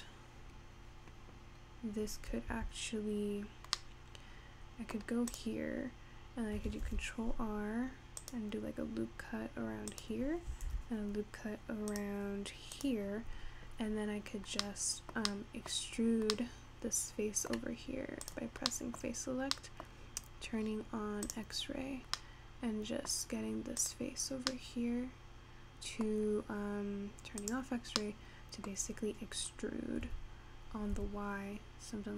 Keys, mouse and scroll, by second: 0.7-2.0 scroll up 2, 2.0-2.7 scroll up 1, 2.7 Tab, 3.2-3.9 scroll down 3, 3.9-5.4 middle drag, 5.4 click, 6.9 ctrl+r, 10.7 ctrl+r, 14.5 scroll down 1, 14.6-16.1 middle drag, 16.1-16.5 scroll up 3, 16.5-17.6 middle drag, 17.6-18.3 scroll down 1, 18.3 click, 18.8 middle click, 19.3-19.7 scroll up 1, 19.7 middle click, 20.1-20.7 scroll down 1, 20.7-21.4 scroll down 12, 21.4 click, 22.3-23.9 middle drag, 23.9 click, 24.5 scroll down 1, 24.6 scroll up 1, 24.9-27.8 middle drag, 27.8 click, 28.0-28.3 scroll down 2, 28.3-29.4 middle drag, 29.4 scroll up 2, 29.7-30.1 scroll down 2, 30.1 e.